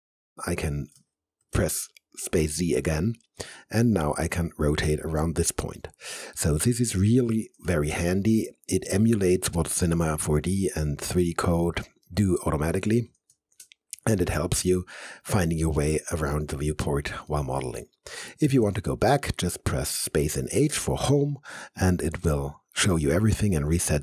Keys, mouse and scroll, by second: 1.4 z, 3.1 z, 3.3-5.8 alt+drag, 5.8 alt+right click, 6.5 alt+middle click, 7.7 space, 7.9 z, 8.6-12.1 alt+drag, 12.1 alt+middle click, 13.3 space, 13.5 z, 14.3-17.3 alt+drag, 17.3 alt+middle click, 18.5 alt+click, 19.1 alt+middle click, 20.3 space, 20.5 h, 23.2 h, 23.4 alt+click.